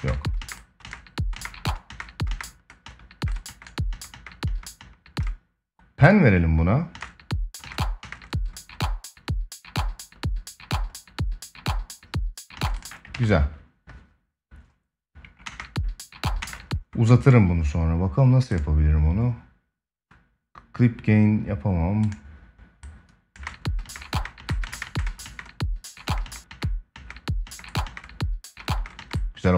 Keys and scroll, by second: 6.6 space, 12.3 space, 12.8 ctrl+s, 15.1 space, 23.1 space.